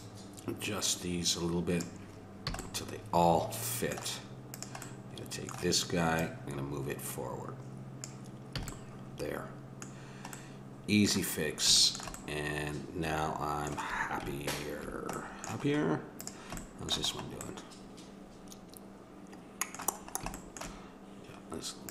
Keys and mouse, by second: 2.5 a, 2.6-4.1 middle drag, 4.5-8.0 drag, 8.5 a, 8.9-11.9 middle drag, 16.1-17.9 drag, 21.8-21.9 drag.